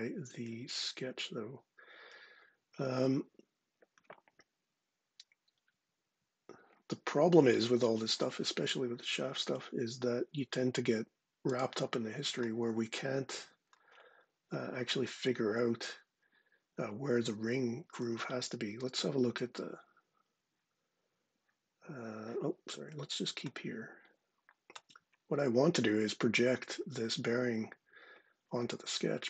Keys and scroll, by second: 18.5 super+Tab.